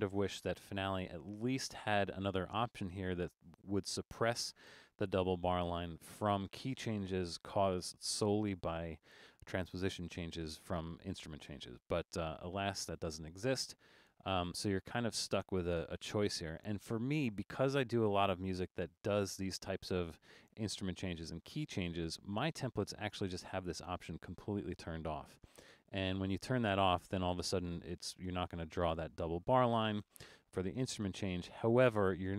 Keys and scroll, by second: 0.1 alt+super+a.